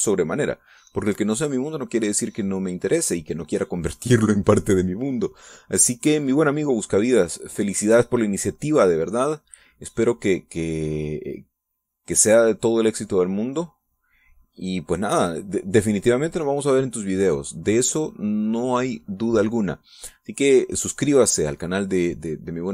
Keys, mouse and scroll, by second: 7.8-17.6 drag.